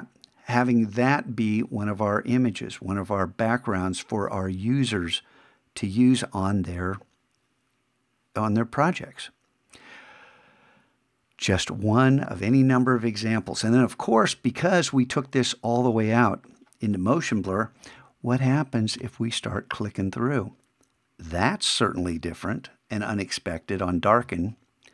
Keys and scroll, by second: 18.4 shift+=, 24.2 shift+=.